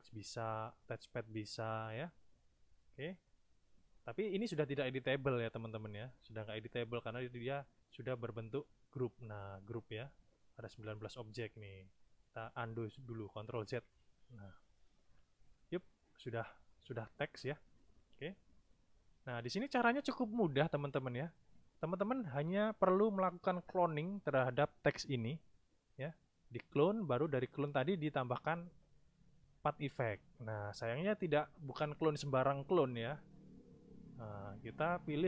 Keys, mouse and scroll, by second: 6.0 click, 13.7 ctrl+z, 14.7 click, 33.4 click.